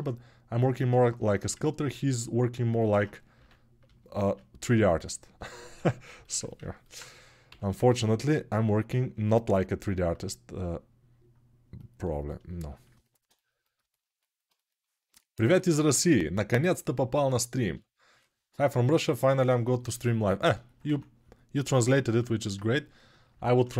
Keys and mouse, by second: 4.0 shift+r, 5.5 ctrl+r, 7.2 g, 8.9-12.3 alt+middle drag, 12.3-22.6 shift+drag, 20.6 1.